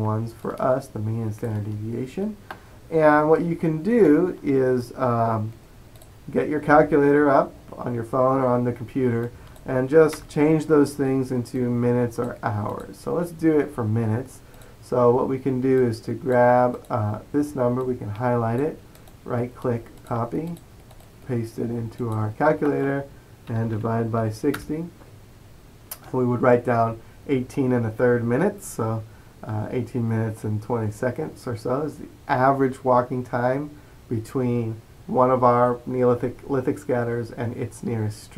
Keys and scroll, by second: 23.6-24.6 typing, 24.6 Return.